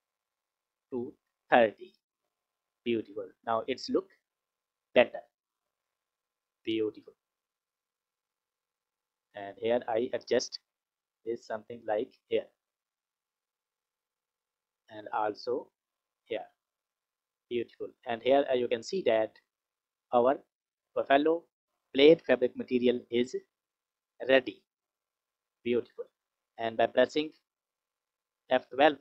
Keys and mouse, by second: 6.9 click, 7.8 drag, 8.7 click, 9.7 click, 11.2 click, 12.7 click, 14.0 click, 15.1-16.2 drag, 25.1 click.